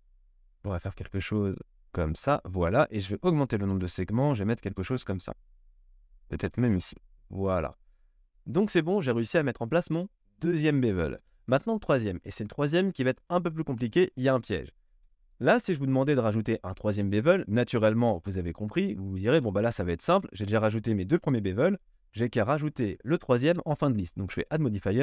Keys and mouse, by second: 14.7-15.4 middle drag, 14.9 KP_1, 15.4-15.8 shift+drag, 15.8-17.0 middle drag, 17.0-25.0 drag.